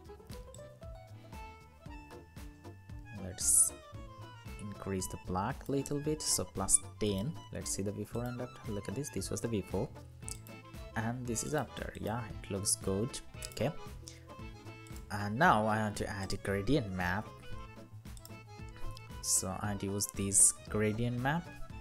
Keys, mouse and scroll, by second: 11.6 double click, 20.8-21.8 scroll down 1.